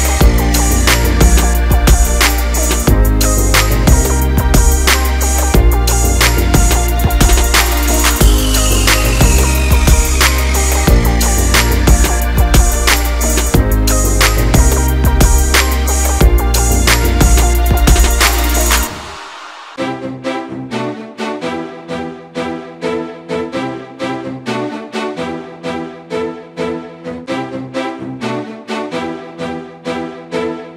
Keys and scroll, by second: 10.0 Return, 15.6 Return, 25.0 Return.